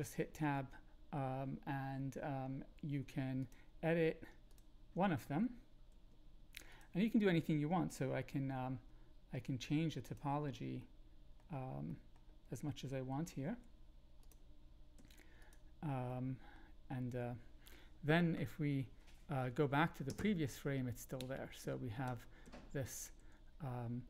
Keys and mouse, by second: 0.1 Tab, 4.5 shift+click, 5.9 g, 6.7 click, 8.6 ctrl+b, 10.8 middle click, 11.8 middle click, 14.2 click, 14.2 i, 14.9 e, 16.1 click, 20.1 Down, 21.1 Up, 21.6 Down, 22.0 Up, 22.4 Down, 22.8 Up, 23.1 Down.